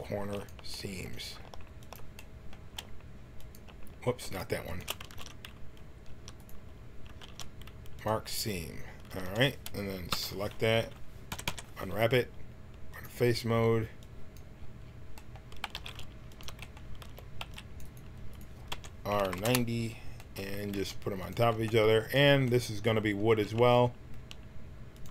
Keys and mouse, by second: 5.1 ctrl+shift+e, 7.2 ctrl+e, 9.0 a, 10.1 l, 11.3 u, 11.4 u, 13.2-14.2 drag, 15.0-16.2 drag, 15.6 g, 17.0 a, 17.4 c, 18.3 click, 18.7 r, 20.7 g, 21.5 b, 23.2 s.